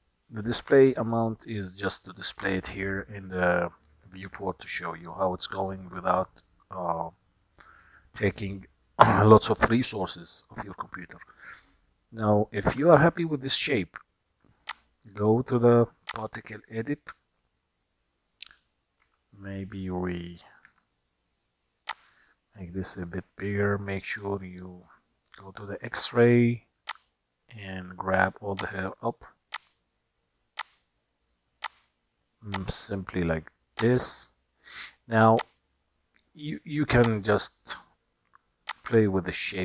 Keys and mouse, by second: 12.7 KP_1, 14.7-16.2 drag, 19.1 s, 20.9 f, 27.1-28.1 drag, 28.7-29.3 drag, 29.8-30.3 drag, 30.7-31.1 drag, 31.8-32.2 drag, 32.8-33.2 drag, 33.9-34.7 drag, 35.5-36.5 drag, 37.1-38.3 drag, 38.7-39.6 drag.